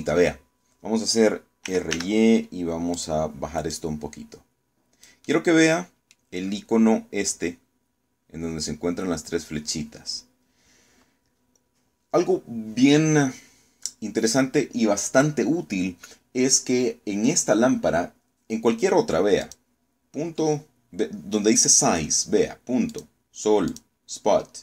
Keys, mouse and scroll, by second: 2.3 r, 2.6 y, 3.6 click, 4.4-5.9 drag, 6.0-7.0 middle drag, 7.1-7.6 scroll up 2, 20.1 click, 23.6 click, 24.4 click.